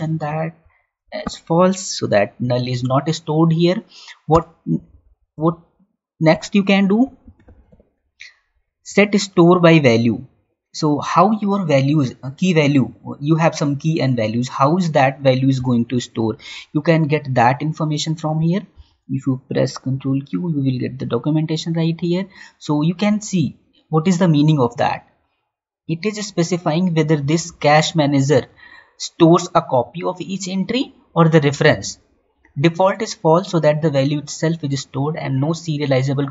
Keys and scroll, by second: 8.4 Down, 18.6 ctrl+q.